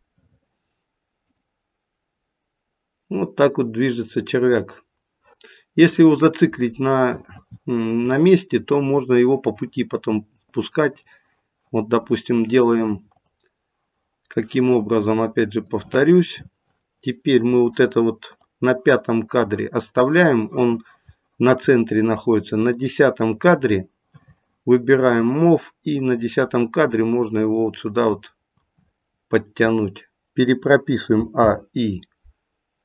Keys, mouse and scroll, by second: 1.2 click, 13.1 click, 15.5 click, 22.6 click, 31.1 a, 31.3 i.